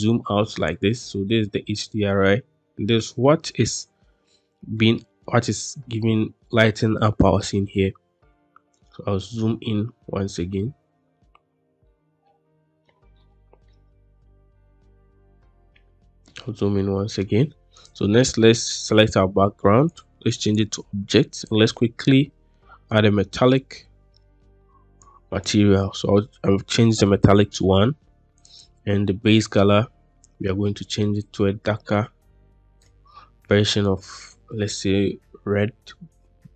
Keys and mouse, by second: 0.8-1.4 drag, 4.7 click, 8.7-9.4 shift+drag, 10.4-11.0 shift+drag, 11.8-12.7 drag, 13.0-13.5 shift+middle drag, 16.2 middle click, 19.8-20.5 drag, 21.3 click, 22.4 middle click, 25.0 click.